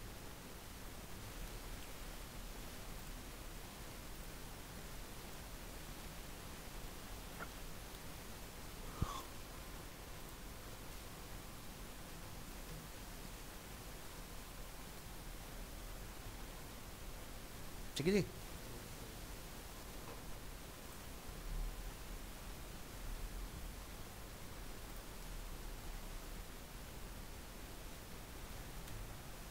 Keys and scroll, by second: 7.9 ctrl+c, 12.8 ctrl+v, 16.6 ctrl+s, 21.8 ctrl+s, 25.7 ctrl+shift+End.